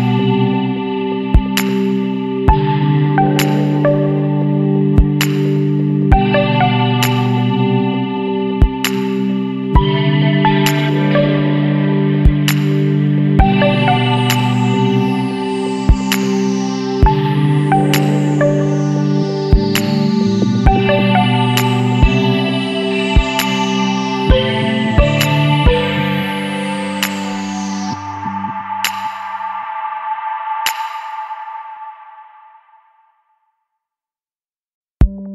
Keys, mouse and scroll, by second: 0.8 KP_1, 1.0 KP_2, 1.6 KP_Enter, 5.2 click, 5.8 click, 7.6 click, 8.1 space, 9.4-10.4 middle drag, 9.6 click, 10.5-10.8 scroll down 1, 11.1 click, 12.2 middle click, 12.5 click, 13.6-13.9 scroll down 1, 14.1-15.1 scroll up 3, 15.7 scroll up 1, 16.9 Right, 19.0 click, 20.9 click, 22.6 click, 26.6 click, 28.8 click, 30.1 click, 31.3 click, 34.4 click.